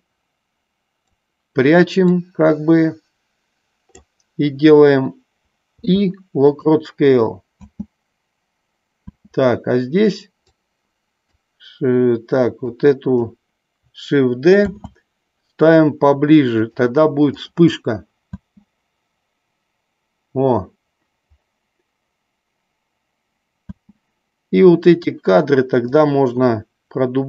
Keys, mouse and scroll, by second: 2.2-4.2 drag, 5.7 i, 7.8 space, 9.4 space, 10.5-11.2 drag, 12.6-13.2 drag, 14.7 shift+d, 16.7 click, 17.7 click, 18.7 space, 24.1 space, 25.2 click.